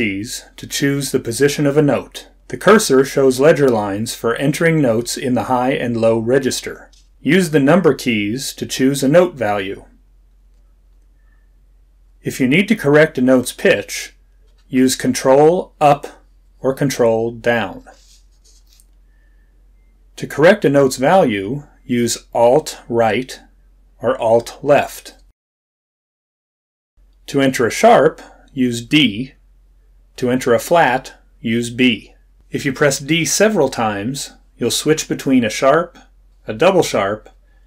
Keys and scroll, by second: 2.0 Down, 30.9 d.